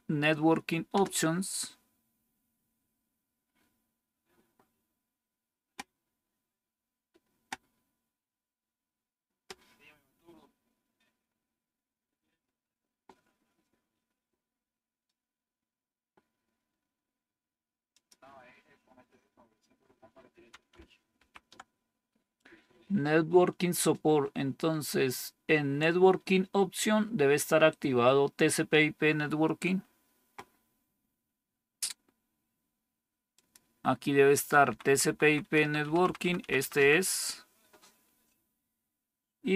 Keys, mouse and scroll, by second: 0.8 Return, 21.1 ctrl+-, 34.6 Down, 34.8 Down, 35.0 Down, 35.1 Down, 35.4 Down, 35.6 Down, 35.7 Down, 36.2 Down, 36.3 Down, 36.5 Down, 36.7 Down.